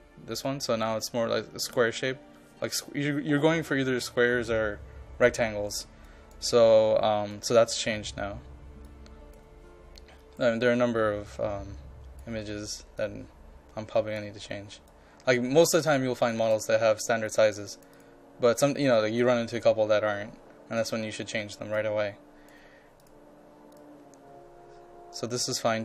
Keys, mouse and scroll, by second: 8.4-25.8 drag.